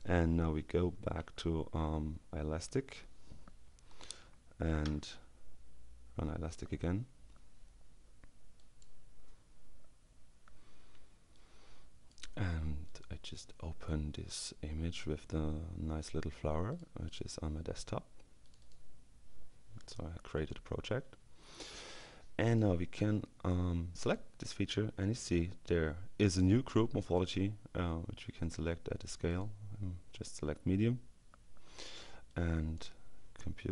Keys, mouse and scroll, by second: 1.3 alt+Tab, 3.7 Up, 4.5 Return, 8.6 click, 11.3-12.7 drag, 12.9 click, 14.1 click, 16.8 click, 17.9-19.2 drag, 20.4 click, 22.5 click, 24.1 click, 28.9-29.9 drag, 32.3-33.3 drag.